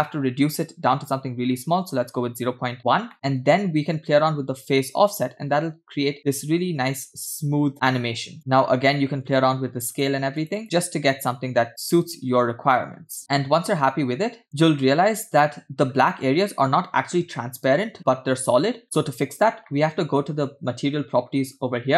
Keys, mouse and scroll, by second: 3.4 middle click, 3.4 scroll down 1, 3.9-8.3 shift+drag, 8.3 middle click, 9.9 click, 10.9 click, 11.7-14.4 shift+drag, 14.4-15.3 scroll down 4, 15.3 scroll up 3, 16.0-17.1 scroll up 2, 18.8-19.1 scroll down 2, 20.1-21.7 scroll down 1, 21.7-21.9 scroll down 1.